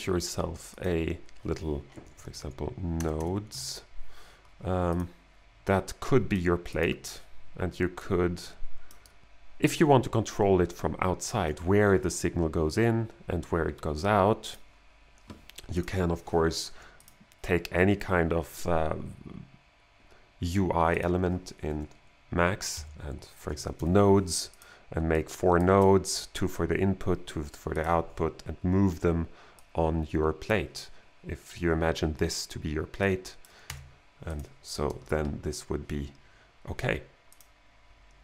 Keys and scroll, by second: 1.4-4.0 typing, 22.8-24.2 typing, 33.7 BackSpace.